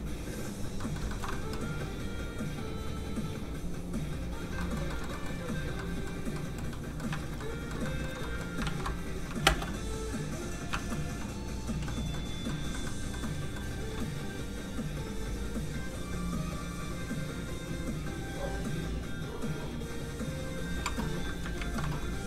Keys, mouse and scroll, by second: 0.8 middle click, 1.1 shift+middle click, 2.4 click, 2.4 middle click, 4.6 middle click, 4.9 shift+middle click, 5.3 middle click, 5.4 scroll down 1, 5.8 middle click, 7.2 alt+shift+z, 7.7 middle click, 7.8 shift+middle click, 8.1 scroll up 1, 8.3 middle click, 8.6 ctrl+s, 9.4 s, 9.6 space, 9.9 click, 10.8 alt+shift+z, 11.4 click, 11.8 middle click, 12.3 scroll down 1, 12.5 middle click, 14.6 click, 21.6 ctrl+Tab, 22.2 scroll up 1.